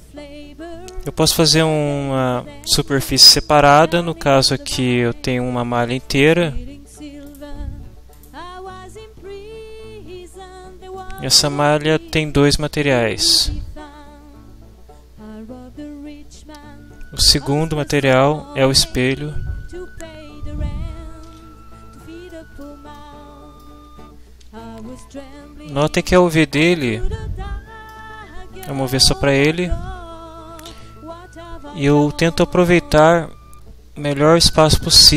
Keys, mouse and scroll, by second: 7.2 scroll down 1, 7.4 middle click, 8.1 right click, 8.8 Tab, 11.0-12.3 middle drag, 13.2 click, 21.3 1, 22.3 shift+middle click, 23.0-24.3 ctrl+shift+middle drag, 24.9 ctrl+Up, 26.0-28.1 ctrl+middle drag.